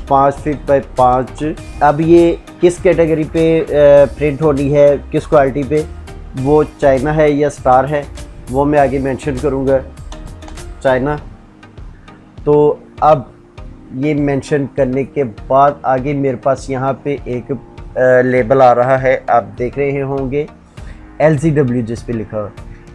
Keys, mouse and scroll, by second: 0.1 x, 1.2 space, 7.9 shift+c, 9.3-10.9 typing.